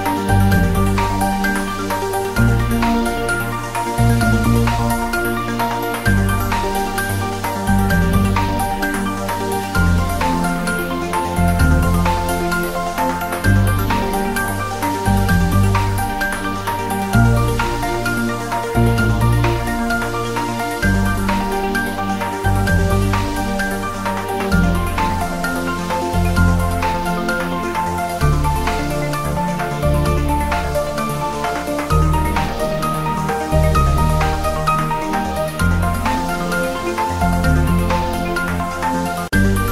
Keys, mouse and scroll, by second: 0.1 scroll up 1, 1.1 click, 1.6 ctrl+r, 1.8 click, 3.1 click, 3.3 Tab, 3.5 right click, 3.8 click, 4.0 scroll down 1, 4.6 click, 5.1 scroll up 1, 5.3 Tab, 5.6-6.0 scroll up 1, 6.0 click, 6.2 click, 6.9 2, 7.1 click, 7.4-8.0 scroll up 1, 8.0 click, 8.6 2, 8.7 click, 9.1 alt+shift+click, 9.6 ctrl+b, 10.2 click, 10.3 ctrl+z, 10.7 scroll down 1, 11.6 Tab, 11.8 scroll down 1, 12.9 click, 13.1 scroll down 1, 13.6 scroll up 1, 13.6 click, 14.0 shift+d, 14.5 click, 14.6-14.9 scroll up 1, 14.9 r, 15.4 click, 15.6-16.1 scroll down 1, 16.1 click, 16.4 scroll up 1, 16.8 r, 17.6 click, 18.0-20.8 typing, 18.6 click, 19.8 click, 20.5 click, 21.0 Down, 22.6 click, 22.8 Return, 23.3 s, 24.0 click, 24.9 click, 25.2 g, 26.4 click, 26.5 scroll up 1, 27.0 r, 29.4 click, 29.5-30.0 scroll down 1, 30.3 r, 30.6 Up, 31.5 click, 31.9 click, 32.1-32.5 scroll down 1, 32.5 g, 33.7 click, 33.9-34.7 scroll up 1, 35.0 click, 35.5-35.8 scroll down 1, 35.8 s, 36.5 click, 36.8 g, 37.1 Left, 37.8 Return, 38.2 click, 38.4-38.9 scroll down 1, 38.9-39.7 drag.